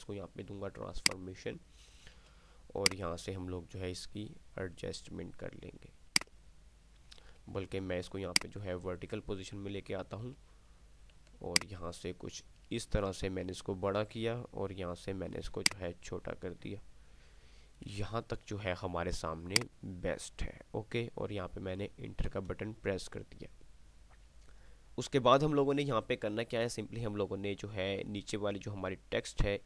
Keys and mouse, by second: 1.3-2.8 alt+shift+drag, 2.8-5.3 drag, 6.3-9.0 drag, 9.0-10.3 shift+drag, 11.3-14.8 alt+shift+drag, 15.8-18.6 shift+drag, 20.0-21.6 drag, 28.5 click.